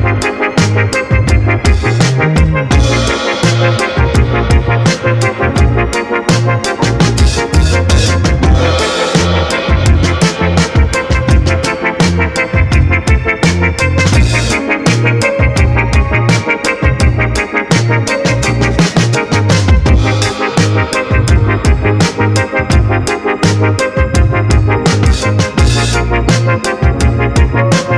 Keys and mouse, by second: 4.0 ctrl+s, 4.3 a, 4.4 a, 6.2 click, 7.4 middle click, 8.5 middle click, 9.1 middle click, 10.2 middle click, 10.8-14.5 drag, 15.5 ctrl+s, 15.8 a, 15.9 a.